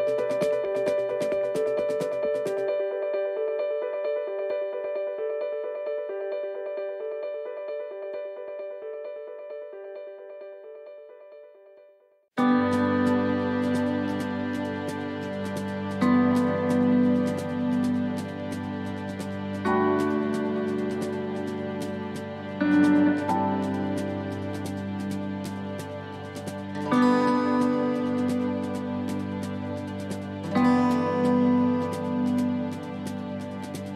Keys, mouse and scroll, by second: 3.8 click, 4.6 click, 9.7 scroll up 3, 10.7 shift+middle click, 11.3-11.7 scroll down 3, 11.7 shift+middle click, 12.2 scroll down 1, 12.7 shift+middle click, 14.1 scroll up 1, 14.6 shift+middle click, 15.0 scroll down 1, 15.5 shift+middle click, 17.6 click, 18.6-19.0 scroll down 3, 19.0 shift+middle click, 19.4-20.2 scroll up 5, 20.2 shift+middle click, 20.7 scroll up 1, 21.2 shift+middle click, 21.6 scroll up 1, 22.2 middle click, 22.9 shift+middle click, 23.7 middle click, 24.5 shift+middle click, 25.1 middle click, 25.7 shift+middle click, 26.2 scroll up 2, 26.6 middle click, 27.5 shift+middle click, 28.0 middle click, 29.0 shift+middle click, 29.8-30.2 scroll up 2, 30.2 middle click, 31.5 click, 32.1 right click.